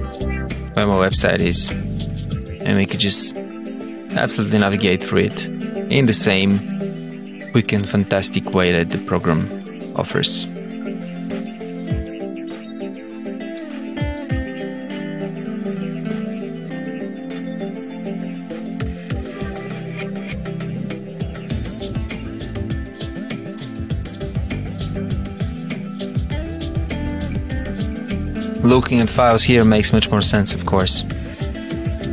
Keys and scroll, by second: 16.2 Down, 16.9 Up.